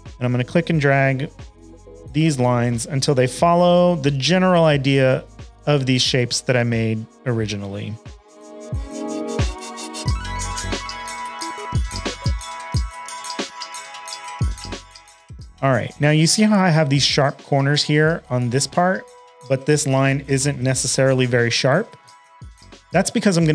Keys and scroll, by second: 22.8 a.